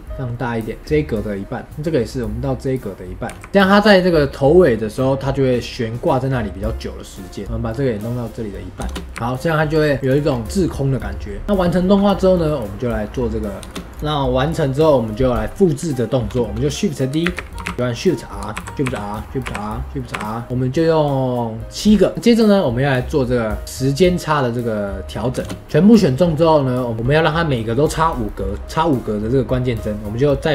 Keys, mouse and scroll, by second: 9.6 scroll down 2, 9.9-15.0 middle drag, 15.0-17.2 drag, 17.2 shift+d, 18.5 shift+r, 18.8 shift+r, 19.4 shift+r, 20.1 shift+r, 20.4-25.1 middle drag, 25.3 space, 26.9-28.2 drag, 28.2-30.5 middle drag.